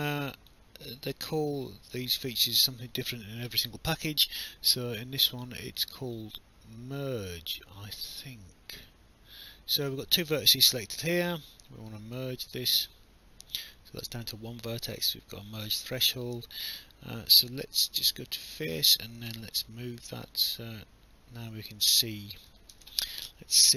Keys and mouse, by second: 0.1 click, 1.0 alt+click, 5.3 click, 12.5 click, 14.6 alt+click, 15.8 alt+click, 16.2 right click, 18.3 click, 19.3 w, 20.3 click, 22.7 ctrl+z.